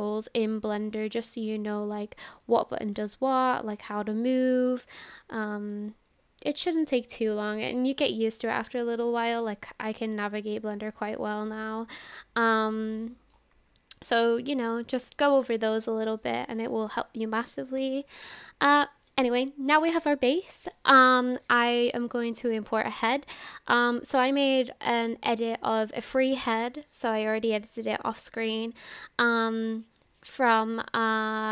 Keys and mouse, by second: 0.1-0.6 drag, 0.1-0.6 right drag, 1.3 click, 1.9 click, 2.4-2.8 shift+drag, 2.4-2.8 shift+right drag, 3.0-3.5 shift+drag, 3.8-4.1 shift+drag, 4.3-4.6 shift+drag, 4.9-5.7 shift+drag, 10.3-11.0 shift+drag, 11.0-12.4 shift+middle drag, 12.9 shift+middle click.